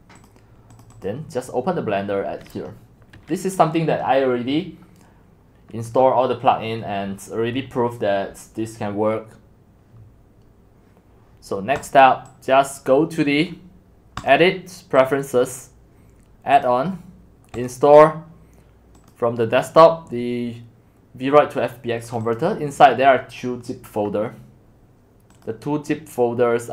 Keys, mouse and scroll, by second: 11.9-15.0 drag, 16.7 click, 22.1-26.7 drag.